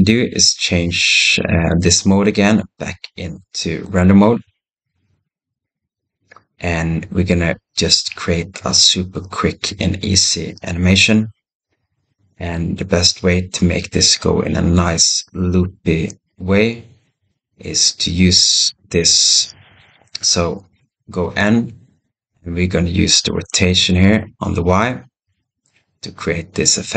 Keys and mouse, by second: 3.7 click, 20.5 n, 21.1 n, 23.2-26.9 drag.